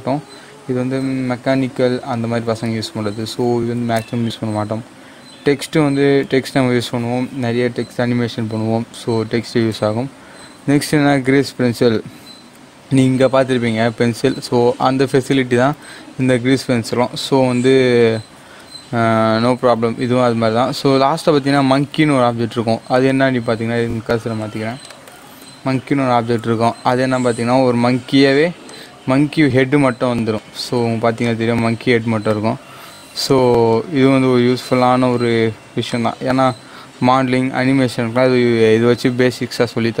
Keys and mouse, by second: 15.6 shift+a, 24.3 shift+a, 24.9 shift+right click, 26.2 shift+a, 28.6 click, 31.5-33.2 drag, 35.8-40.0 drag.